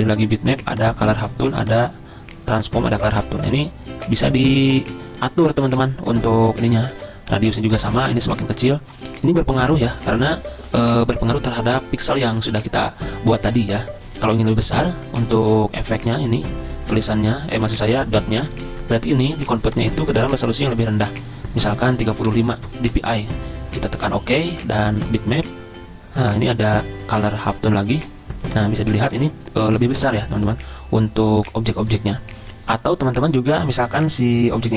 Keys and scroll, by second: 22.3 typing.